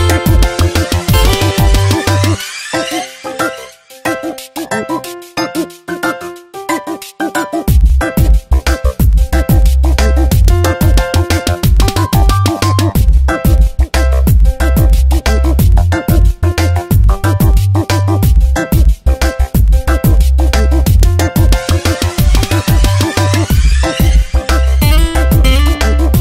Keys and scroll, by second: 3.1 space, 5.8 ctrl+t, 6.7 Return, 12.2 ctrl+t, 14.1 Return, 14.5 shift+Up, 14.8 shift+Left, 15.3 shift+Up, 15.9 ctrl+t, 17.2 Return, 17.7 ctrl+t, 20.6 Return, 21.5 ctrl+t, 22.1 Return, 23.1 ctrl+e.